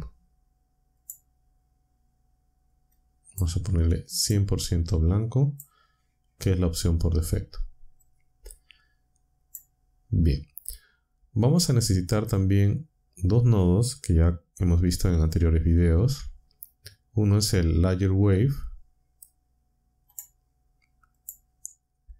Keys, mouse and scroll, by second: 1.0 click, 2.9 click, 3.9 click, 4.9-5.7 drag, 8.0-9.7 drag, 15.7 shift+a, 20.1 click, 21.1 click.